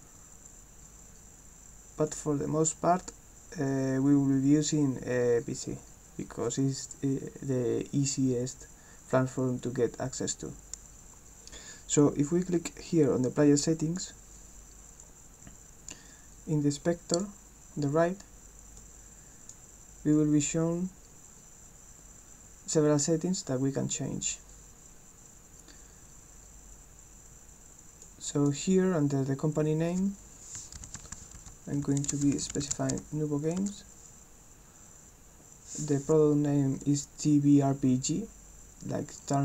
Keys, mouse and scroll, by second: 0.2 scroll up 2, 0.8 scroll up 2, 1.6-2.1 scroll up 2, 2.1 click, 13.8 click, 17.2 click, 18.8 click, 28.1 click, 32.5 a, 32.9 s.